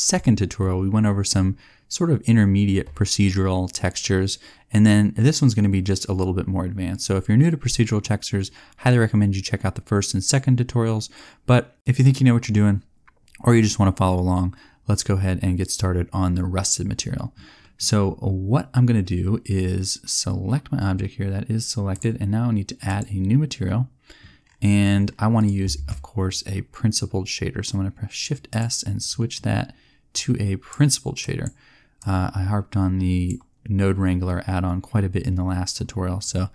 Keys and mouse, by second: 25.8 shift+s, 30.3 click.